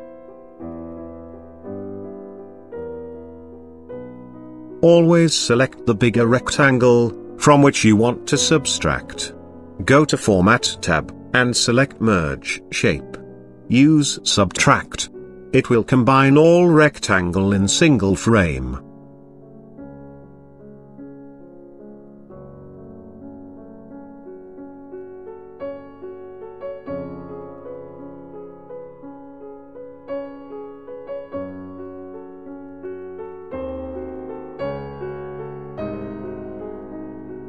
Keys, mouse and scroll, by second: 5.3 ctrl+click, 7.1 ctrl+click, 8.0 ctrl+click, 9.9 ctrl+click, 10.7 ctrl+click, 10.8 ctrl+click, 12.9 click, 18.1 click, 19.1 click, 20.1 click, 26.2 click, 26.6 click, 27.5 click, 34.9 click, 36.0 click.